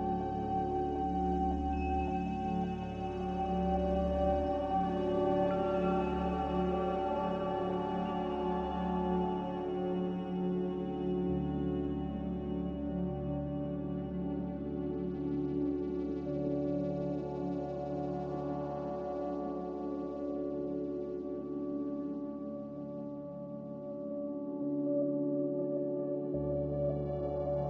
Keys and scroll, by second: 6.8-10.3 typing, 16.9 3, 22.5 3, 24.7 3, 25.7 2.